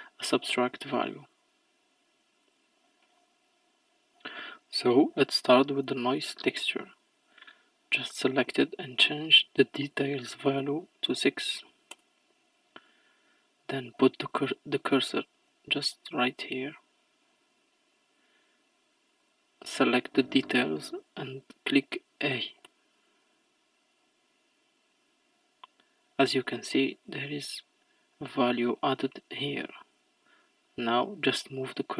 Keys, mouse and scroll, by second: 11.9-24.3 drag, 27.1-31.9 drag.